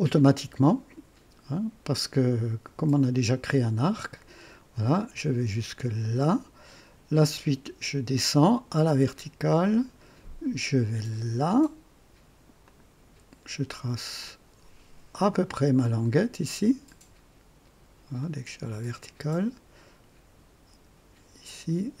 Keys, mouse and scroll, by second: 6.1 click, 9.6 click, 12.5 click, 15.1 click, 18.1 click.